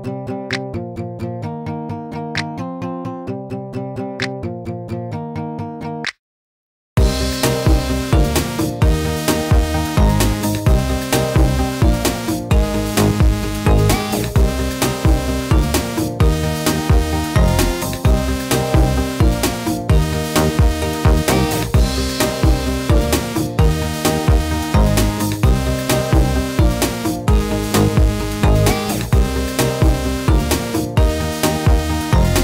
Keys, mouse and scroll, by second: 1.1 click, 1.6 click, 3.8 click, 4.3-5.8 drag, 6.1 middle click, 6.5-6.8 drag, 6.6-7.1 right drag, 7.4 n, 7.7 click, 8.2 drag, 8.2 right drag, 8.7-9.8 drag, 9.1 right click, 9.7 right click, 10.1 click, 10.3 click, 10.5 x, 10.6 shift+a, 12.3 click, 13.0 middle click, 13.7 right click, 14.3 middle click, 14.8 click, 16.1 click, 16.3 right click, 16.7 i, 17.4 i, 17.8 click, 18.4 click, 18.6 right click, 19.0 i, 19.5 click, 19.8 right click, 20.1 click, 20.8 right click, 21.1 click, 21.4 right click, 21.7 i, 22.3 middle click, 23.2 i, 23.7 middle click, 24.0 click, 25.3-25.7 right drag, 25.5 middle click, 26.1 shift+d, 29.4 middle click, 30.2-30.6 drag, 30.5 right drag, 30.9 s, 32.3 ctrl+z.